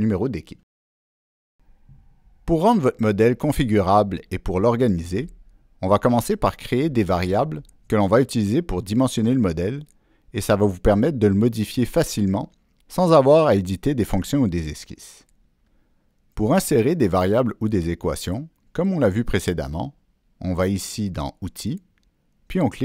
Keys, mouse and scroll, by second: 20.2 click.